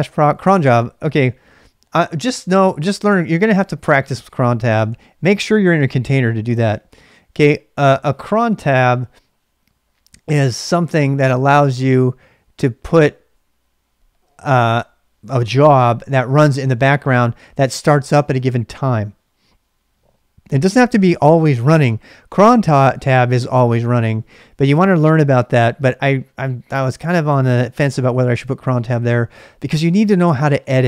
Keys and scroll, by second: 0.3-1.3 typing.